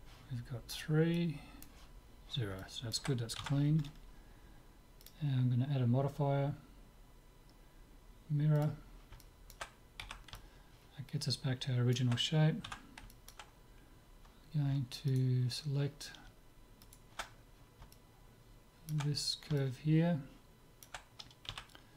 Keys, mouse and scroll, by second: 1.2-3.0 drag, 2.6 right click, 3.0 middle click, 3.4 Tab, 3.8 middle click, 5.0-6.8 drag, 9.2 middle click, 10.0 z, 10.4-12.1 middle drag, 12.7 Tab, 13.1-15.2 middle drag, 15.2-18.8 right drag, 17.9 click, 18.8-21.3 middle drag, 21.5 z.